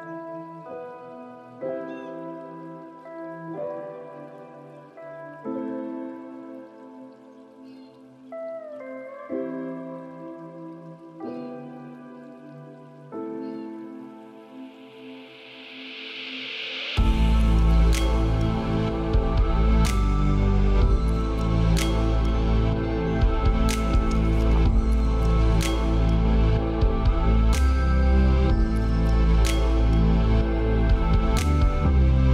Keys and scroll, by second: 26.6 ctrl+space.